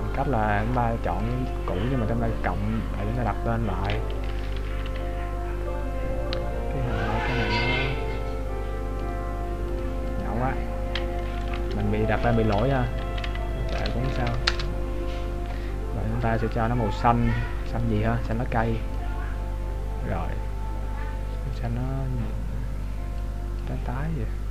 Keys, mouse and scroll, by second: 1.4 click, 4.9 Left, 7.7 click, 11.3 Left, 13.4 shift+Right, 16.4 click, 21.7 click.